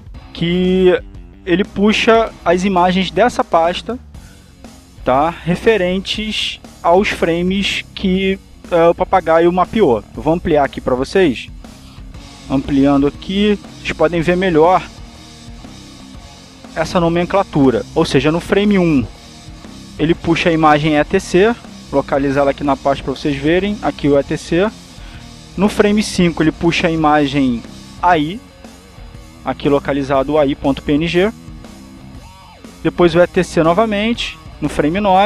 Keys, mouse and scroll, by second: 9.8 click, 10.3 right click, 11.4 click, 12.8 right click, 13.8 click, 16.5 alt+Tab, 18.5-19.6 drag, 20.6 click, 22.0-25.7 drag, 26.7 click, 27.3-28.8 drag, 29.4-30.6 drag, 31.9 click, 33.0 click.